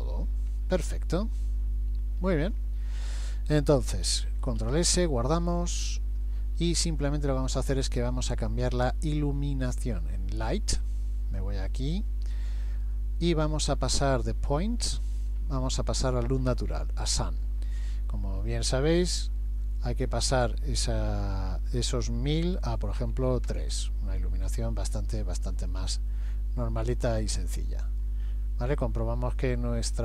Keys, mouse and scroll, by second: 0.9 KP_1, 1.3 KP_3, 2.2-2.8 scroll down 6, 3.8 scroll down 2, 4.7 ctrl+s, 5.4 middle click, 10.1 click, 25.5 middle click, 27.5-30.0 scroll down 6.